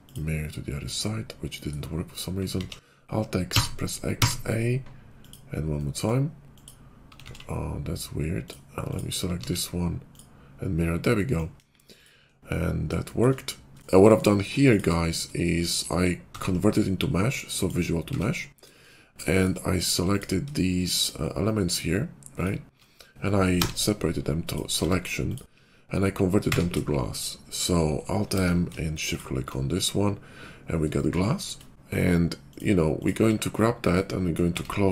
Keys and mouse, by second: 0.1 alt+x, 0.1 click, 0.4-2.4 middle drag, 2.4 alt+x, 5.2 alt+x, 5.2 click, 5.3-6.4 middle drag, 6.4 click, 6.6 middle click, 7.2 alt+x, 10.2 alt+x, 10.2-11.9 drag, 11.5 KP_5, 11.9-14.6 middle drag, 14.6 click, 14.7-15.9 shift+middle drag, 16.3 ctrl+a, 18.0 Tab, 19.1-20.5 shift+middle drag, 22.7-25.3 alt+middle drag, 23.4 p, 24.8 Tab, 26.4 q, 28.2 alt+m, 29.6-31.4 middle drag, 32.4 click, 33.4 /, 34.4 Tab.